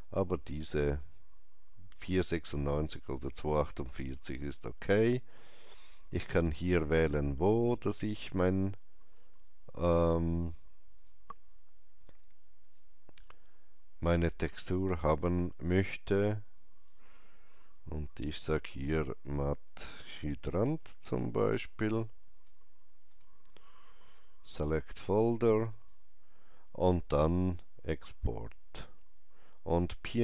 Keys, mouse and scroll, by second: 0.2 click, 9.0 click, 12.5 click, 16.1 click, 18.5-22.2 typing, 18.7 click, 22.3 Return, 22.9 Return, 25.7 Return, 25.7 click.